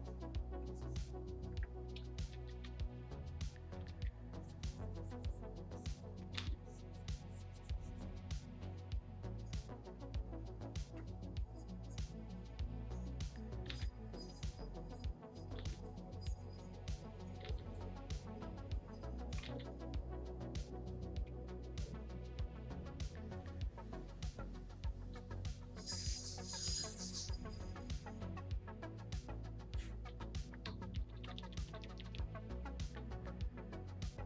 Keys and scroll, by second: 2.2 ], 2.3 ], 3.7 ], 3.9 ], 6.3 ctrl+z, 13.6 ctrl+z, 15.5 ctrl+z, 17.4 ctrl+z, 19.4 ctrl+z, 30.0-32.0 typing.